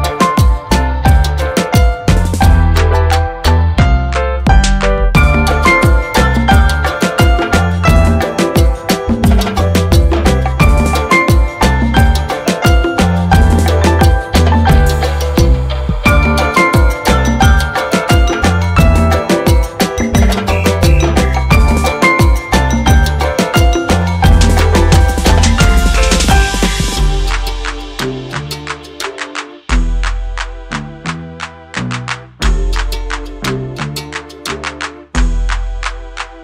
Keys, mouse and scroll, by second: 5.6 click, 10.0 click, 17.7 click, 17.8 click, 23.0 click, 23.8 click, 29.0-30.5 drag, 33.0 scroll up 1, 34.9 click.